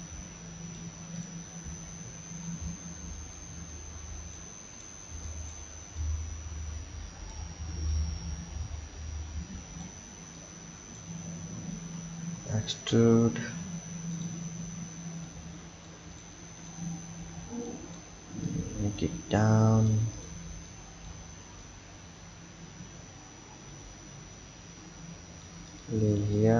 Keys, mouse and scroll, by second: 1.1 click, 3.0 b, 4.8 click, 5.1 b, 6.0 click, 7.9 click, 10.1 b, 11.9 e, 15.3 click, 17.2 b, 18.5 click, 20.1 click, 20.5 b, 21.6 click, 25.7 click, 26.0 b.